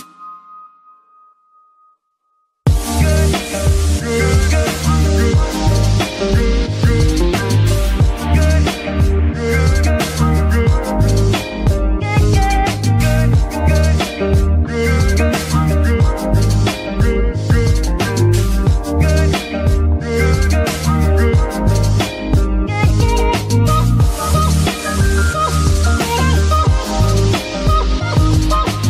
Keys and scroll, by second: 0.7 a, 21.9 BackSpace.